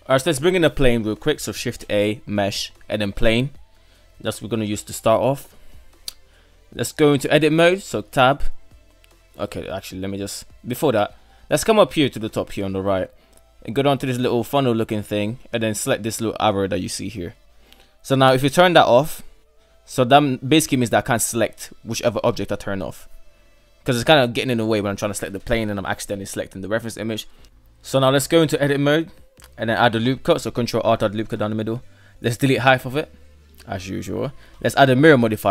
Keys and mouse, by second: 0.4 KP_1, 1.8 shift+a, 5.7 middle click, 6.0 middle drag, 6.4-6.8 middle drag, 7.7 ctrl+r, 8.6 right click, 9.7 right click, 10.7 shift+middle click, 11.2 right click, 13.8-14.5 drag, 14.7-17.5 drag, 18.8 click, 20.6 click, 21.2 click, 22.0 right click, 22.4 right drag, 22.8-23.2 right drag, 23.4 right drag, 23.8 right drag, 25.7-26.2 right drag, 26.6-28.1 right drag, 28.1 Tab, 29.0 ctrl+r, 31.1 KP_3, 31.8 Delete, 33.2 Tab, 34.9-35.5 drag.